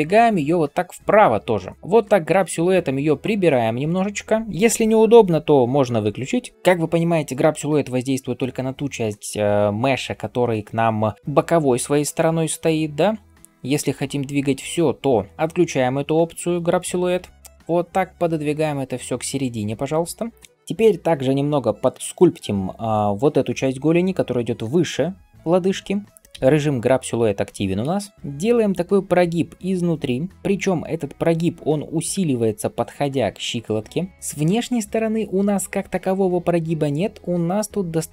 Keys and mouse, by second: 6.5-26.2 right drag, 12.6-20.3 drag, 12.6-20.3 middle drag, 27.8-38.1 right drag, 27.8 n, 28.1 f, 28.3-30.3 drag, 28.3-30.3 middle drag, 30.3 f, 30.7-38.1 drag, 30.7-38.1 middle drag.